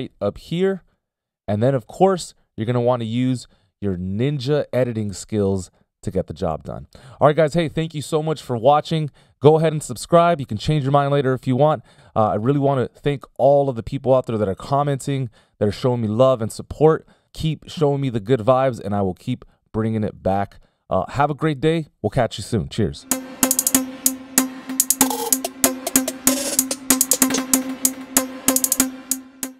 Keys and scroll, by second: 0.6 ctrl+alt+super+m, 4.7 ctrl+alt+super+m, 25.7 c.